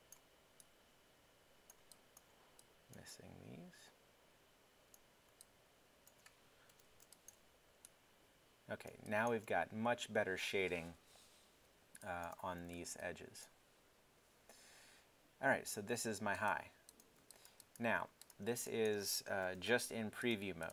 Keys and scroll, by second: 6.7 alt+3, 7.2 3, 18.0 alt+w, 19.4 alt+3, 20.0 3.